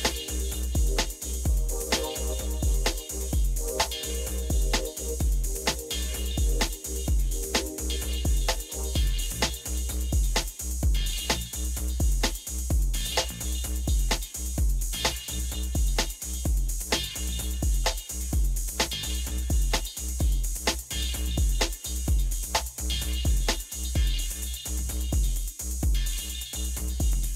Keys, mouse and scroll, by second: 11.4 Down, 11.8 Down, 12.7 Down, 13.9 Down, 15.4 Down, 15.6 Down, 16.4 Down, 16.7 Down, 17.2 Up, 17.5 Up, 18.3 Down, 18.5 Down, 18.7 Down, 18.9 Down, 19.2 Down, 19.4 Down, 26.1 Down.